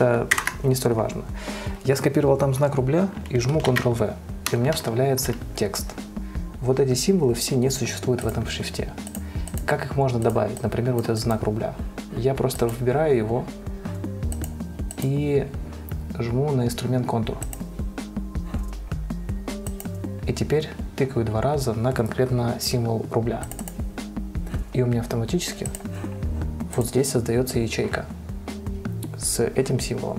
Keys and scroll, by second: 0.7 shift+Return, 4.0 ctrl+v.